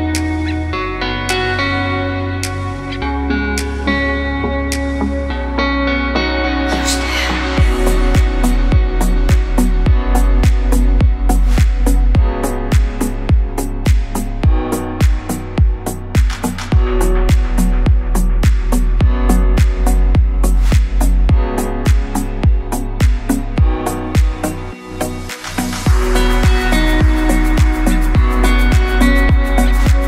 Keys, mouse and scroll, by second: 0.0 Tab, 0.1 e, 3.1 click, 4.0 e, 6.5 click, 6.9 KP_7, 8.2 e, 10.2 KP_1, 11.6 alt+click, 14.0 ctrl+b, 20.4 alt+click, 22.0 ctrl+click, 24.8 click, 26.2 click, 26.5-27.4 scroll up 2, 27.4 alt+click, 27.5 alt+click, 29.0 click.